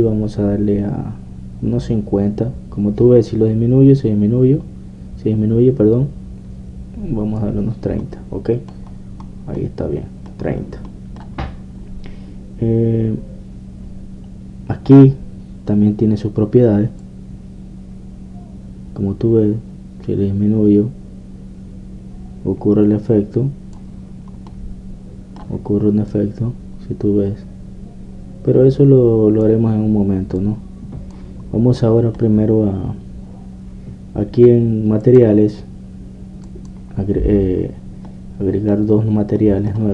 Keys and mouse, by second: 9.0 middle click, 10.3-11.5 middle drag, 18.0-20.2 drag, 25.5-27.1 middle drag, 27.1-29.0 drag, 31.4-33.3 drag, 33.3 middle click, 36.1-37.7 drag, 38.6 click, 39.5 middle click.